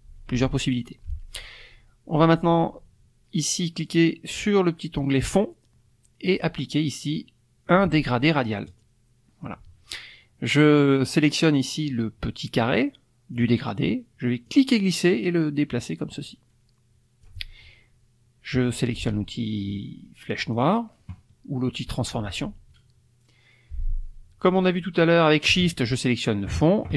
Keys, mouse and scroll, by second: 5.2 click, 8.7 click, 13.3 click, 14.4-17.4 drag, 20.4 click, 26.5 shift+click.